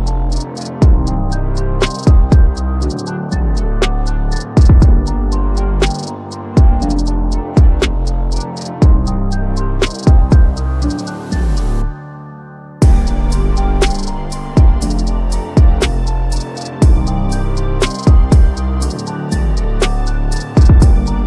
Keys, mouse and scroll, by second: 0.2-0.5 click, 0.6-1.8 typing, 2.7 click, 5.7 click, 7.5-9.6 drag, 11.0 ctrl+z, 11.6-12.6 drag, 17.8-18.3 drag, 19.8-20.3 drag.